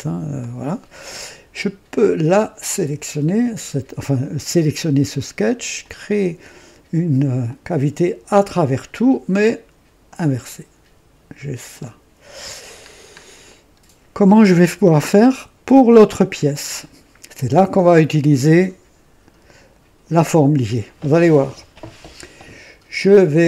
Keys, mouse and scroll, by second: 0.3-1.2 drag, 5.7 click, 7.4 click, 8.3 click, 10.1 click, 11.6 click, 12.8 scroll down 1, 13.4-14.1 right drag, 14.3-15.3 drag.